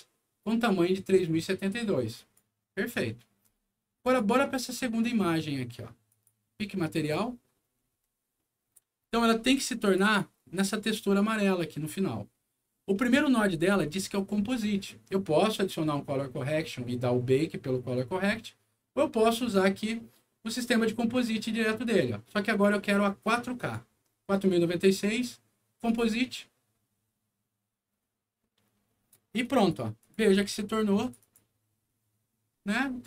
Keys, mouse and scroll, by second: 2.1 click, 4.0 click, 6.0 click, 7.6-8.1 scroll up 2, 8.3 middle click, 8.9-9.4 scroll up 2, 9.8 click, 10.0 click, 13.4 scroll down 1, 22.4 click, 23.5 click, 25.8 click, 29.4 click, 29.9 click, 30.1 click, 30.9 click, 31.1 click.